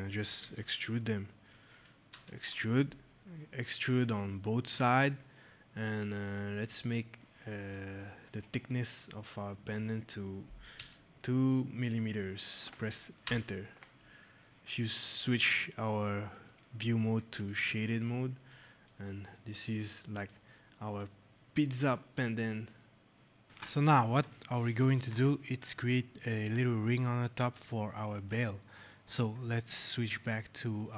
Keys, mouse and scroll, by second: 0.3 e, 2.0 Return, 6.8-7.6 scroll, 7.6 right click, 10.2 scroll, 10.6 scroll down 2, 13.1 Return, 15.2 click, 17.9 right click, 18.7 right click, 20.4 scroll, 20.9 right click, 21.1 middle click, 21.9 scroll, 27.4 right click, 30.0 click.